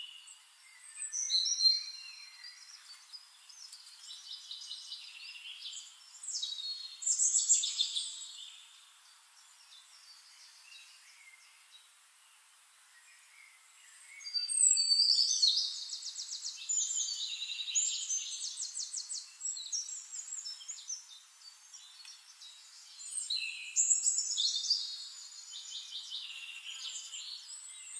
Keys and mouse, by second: 1.4-3.7 shift+right drag, 2.6 shift+click, 3.1 middle click, 4.3-7.5 drag, 10.5 click, 13.0 click, 14.5-16.7 drag, 16.9-27.9 drag, 26.5-27.9 shift+right drag, 27.1-27.9 shift+middle drag.